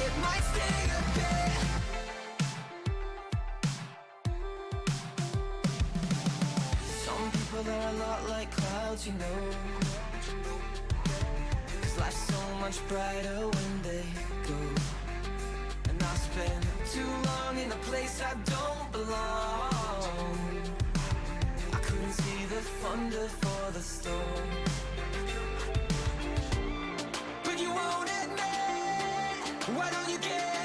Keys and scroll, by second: 13.2-14.9 typing, 15.0 Return, 19.1-22.5 typing, 22.9 Return.